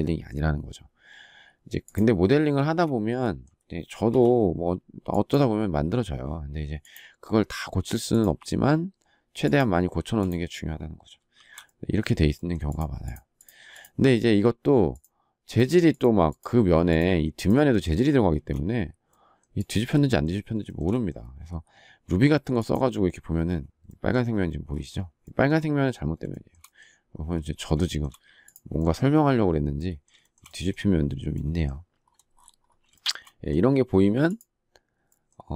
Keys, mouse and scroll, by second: 2.3 space, 9.7 space, 11.1 shift+r, 18.1 space, 20.4 shift+middle click, 26.1 shift+middle click, 27.6 shift+middle click, 30.0 shift+middle click, 32.7 shift+middle click.